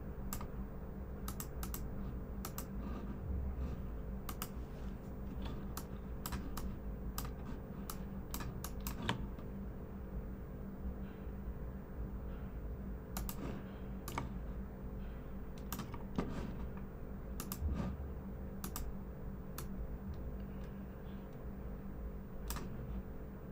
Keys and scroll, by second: 5.4-6.0 typing.